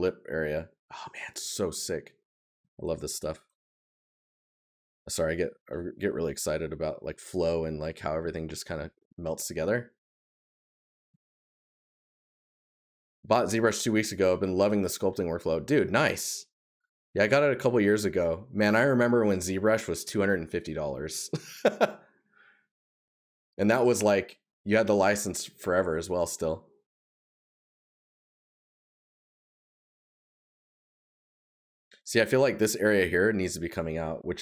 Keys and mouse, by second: 8.7 right click, 10.8 right click, 25.4 right click, 27.4 right click, 29.3 right click, 31.1 right click, 32.6 right click.